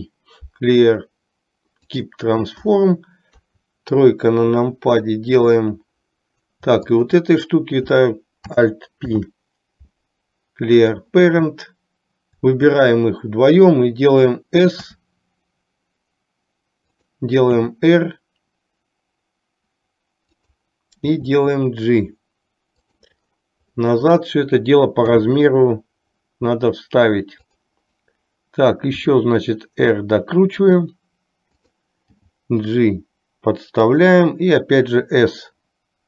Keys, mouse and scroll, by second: 3.5 KP_3, 7.0 shift+click, 9.1 alt+p, 15.0 s, 17.7 r, 21.2 g, 25.1 s, 29.1 r, 32.3 g.